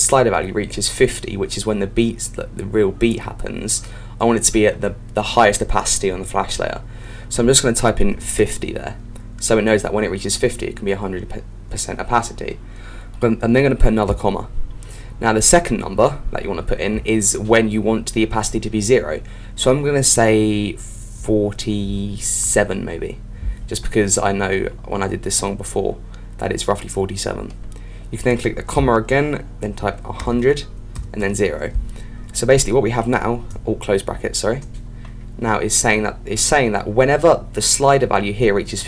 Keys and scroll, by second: 34.0 shift+0.